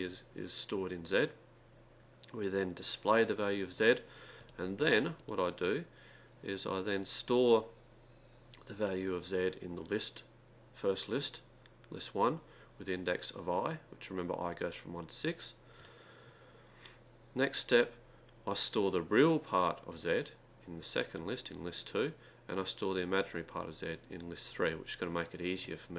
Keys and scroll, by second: 4.4-6.5 typing, 15.8-16.5 typing, 25.6 Return.